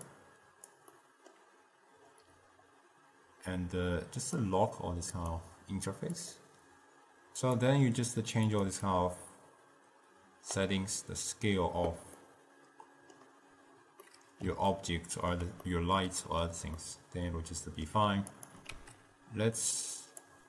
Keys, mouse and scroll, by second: 0.2 click, 1.1-4.1 middle drag, 4.3 click, 5.3 click, 6.3 click, 7.6-8.9 drag, 9.0-12.0 drag, 12.3-14.7 middle drag, 14.8 ctrl+scroll up 1, 14.9-18.5 ctrl+middle drag, 18.5 click, 18.8 shift+d.